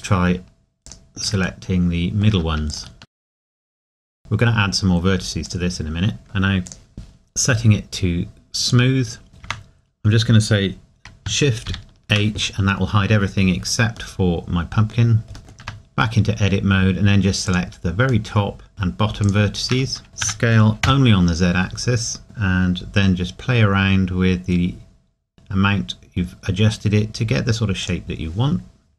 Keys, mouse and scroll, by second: 1.6 middle click, 3.0 middle click, 3.1 alt+shift+click, 3.2 middle click, 3.4 middle click, 3.6 alt+shift+click, 3.6 middle click, 3.7 alt+shift+click, 3.8 s, 5.4 click, 6.7 click, 9.3 scroll down 1, 9.4 Tab, 11.7 shift+h, 14.1 middle click, 15.6 Tab, 17.5 click, 18.3 middle click, 20.0 middle click, 20.2 s, 24.2-24.9 scroll down 1, 27.8 click.